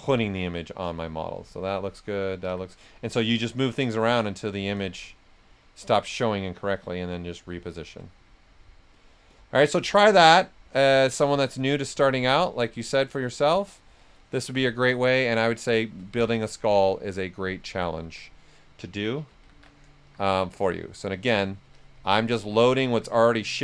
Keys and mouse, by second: 1.7 alt+shift+right click, 2.4 s, 2.5 click, 5.9-8.1 shift+drag, 8.1 click, 12.7-14.6 shift+drag, 14.3 typing, 14.6 ctrl+right click, 15.6 shift+click, 16.1 right click, 16.5 alt+shift+right click, 17.6 right click, 18.0 s, 18.1 click, 19.0-20.7 typing, 20.0 click, 22.8 s, 22.9 click, 23.3 alt+click.